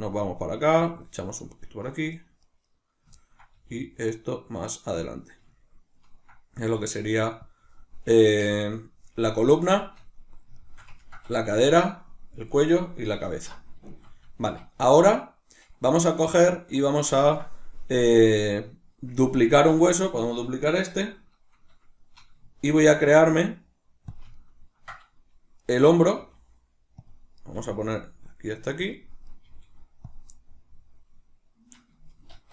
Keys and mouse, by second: 1.0 click, 1.5 right click, 2.1 right click, 2.4 right click, 2.6 right click, 3.2-5.1 ctrl+middle drag, 3.6 g, 5.1 click, 5.6-7.6 ctrl+middle drag, 6.6 g, 7.6 click, 9.7-19.7 shift+middle drag, 13.2 alt+o, 19.7 right click, 22.6 shift+d, 24.3-25.6 ctrl+middle drag, 25.6 right click, 26.2 g, 27.1 click, 27.4 right click, 27.6 g, 29.0 click, 29.3 right click, 29.4 g, 30.2 click, 32.3 alt+o, 32.3 middle click.